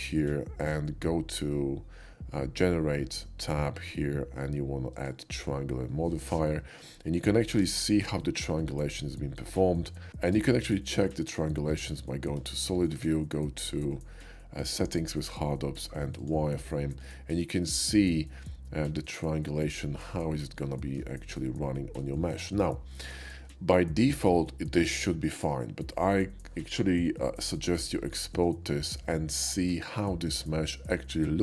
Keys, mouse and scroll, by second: 4.9 click, 7.5 q, 8.6 q, 10.2 Tab, 11.1 shift+middle click, 11.7 Tab, 12.5 shift+middle click, 12.9 q, 16.2 click, 17.0-17.4 middle drag, 17.7-18.9 shift+middle drag, 19.6-20.1 shift+middle drag, 20.8 middle drag, 21.4-22.0 middle drag, 22.9-23.3 middle drag, 27.7 middle click, 27.8 right click, 27.9-28.4 middle drag, 28.7 shift+middle drag, 29.1-29.7 shift+middle drag, 30.4-31.4 shift+middle drag.